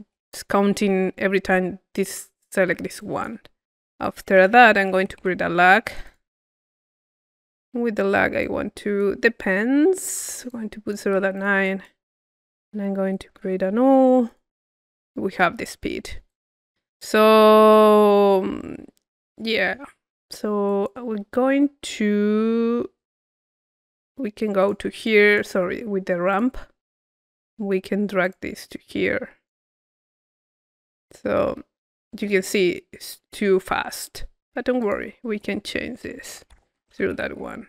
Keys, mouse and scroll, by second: 2.0-3.9 drag, 4.0-5.2 drag, 4.3 Tab, 6.1 click, 8.4 click, 9.3-14.1 drag, 12.8 Tab, 13.5 u, 14.9-16.1 drag, 15.3 middle click, 16.3-17.3 drag, 17.7-19.1 drag, 19.6-20.6 middle drag, 19.6-20.6 scroll up 1, 20.6-22.1 drag, 23.6 click, 24.6-25.9 drag, 26.0 click, 26.8-28.2 middle drag, 28.2-30.4 drag, 34.8-35.9 drag.